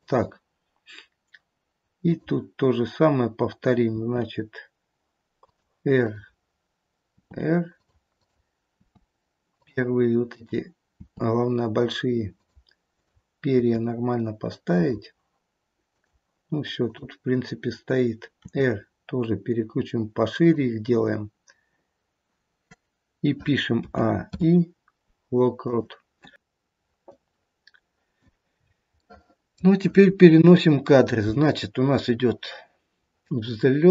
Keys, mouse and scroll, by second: 2.0 click, 4.0 r, 6.0 click, 7.2 r, 8.1 click, 8.8 r, 10.2 click, 11.0 r, 12.8 click, 13.6 r, 15.8 click, 16.7 click, 18.5 r, 23.8 a, 24.3 i, 27.0 click, 28.5-28.9 scroll down 4, 28.9 middle click, 29.3 middle click, 30.2 KP_3, 31.9 click.